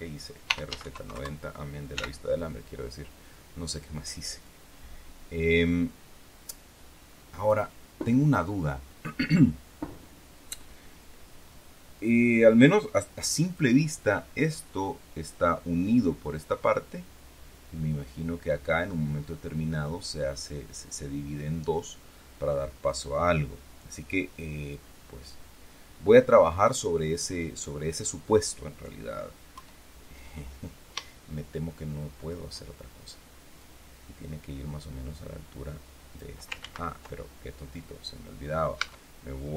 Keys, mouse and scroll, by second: 0.1-1.8 typing, 4.3-7.6 drag, 11.9-13.7 drag, 24.6-26.7 drag, 29.4 KP_1, 31.2-32.4 shift+drag, 33.5-36.3 drag, 36.5 ctrl+z, 38.7 Tab.